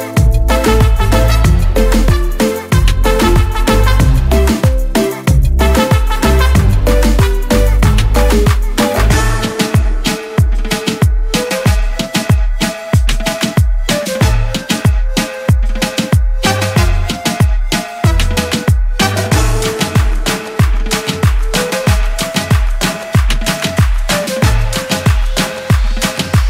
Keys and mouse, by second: 3.3 click, 5.7 click, 5.8 click, 8.8 click, 8.9 click, 12.0 click, 16.2 click, 17.7 click, 20.5 click, 22.8 click, 24.8 click.